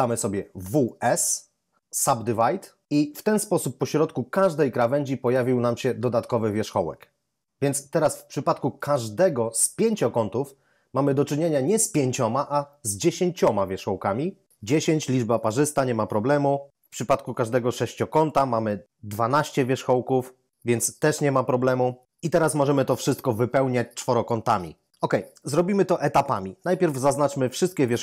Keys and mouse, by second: 0.6 w, 1.0 s, 4.2 right click, 8.7 ctrl+right click, 17.2 right click, 17.9 ctrl+right click, 19.2 ctrl+right click, 27.4 a, 27.8 a.